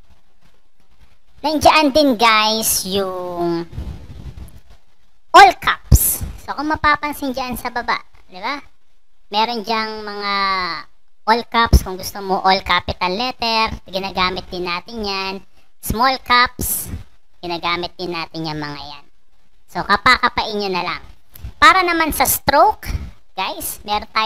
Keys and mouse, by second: 11.3 click, 13.4 click, 15.8 click, 17.2 click.